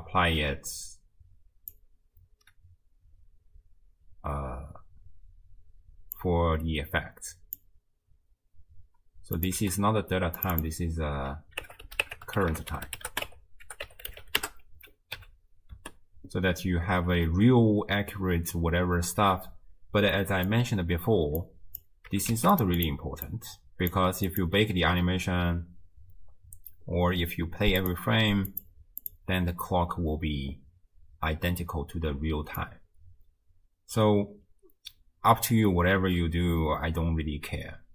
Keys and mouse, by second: 6.3 click, 9.4 click, 9.6 n, 10.4 click, 10.6-14.5 drag, 12.5 r, 15.2 n, 15.8 space, 19.6 space, 20.2 click, 21.4 click, 22.1 g, 22.8 click, 23.3 click, 24.3 click, 27.9-29.3 drag, 32.6-37.9 drag.